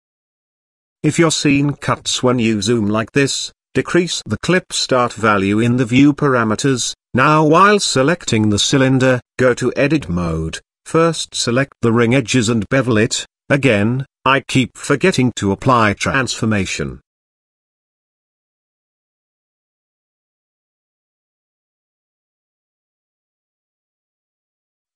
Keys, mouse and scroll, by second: 2.2 click, 3.4-4.9 drag, 5.8 click, 6.1 Tab, 7.4 click, 9.3 click, 10.6 shift+middle click, 12.4 click, 12.8 click, 13.8 click, 14.5 alt+click, 16.7 ctrl+b, 18.9 Tab, 19.2 ctrl+a, 19.9 Tab, 20.6 ctrl+b, 24.6 Tab.